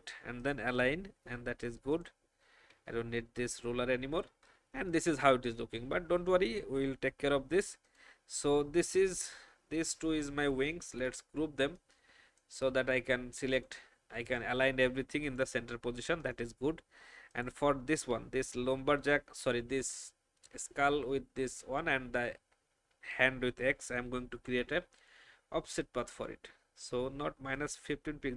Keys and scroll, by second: 3.0 Delete, 10.8 ctrl+g.